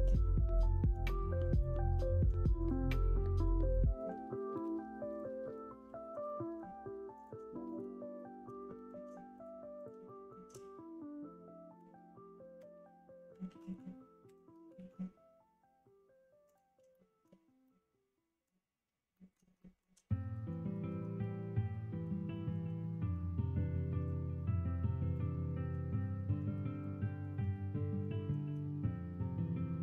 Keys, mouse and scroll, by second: 0.0 middle click, 1.5 shift+click, 1.9 middle click, 2.6 shift+click, 3.3 shift+click, 3.7 middle click, 4.5 ctrl+e, 6.3 middle click, 7.1 click, 7.7 shift+click, 8.5 middle click, 9.3 shift+click, 9.7 shift+click, 10.0 middle click, 10.4-11.7 middle drag, 12.5 f, 13.4 ctrl+z, 14.2 ctrl+w, 14.7 ctrl+e, 16.9 shift+middle click, 17.6 middle click, 19.1 middle click, 19.6 shift+middle click, 20.1 middle click, 20.7 shift+middle click, 21.1 middle click, 22.3 shift+middle click, 22.8 middle click, 23.8 shift+middle click, 27.2 shift+click, 28.0 click, 29.1 g.